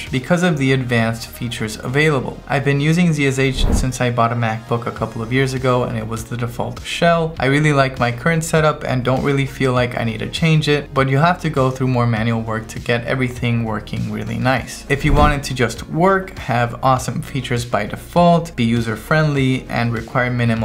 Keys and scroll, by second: 15.1-16.1 typing, 16.7 Right, 17.8 q, 18.1 Right, 19.0 v, 19.5 Right, 20.2 space, 20.5 Tab.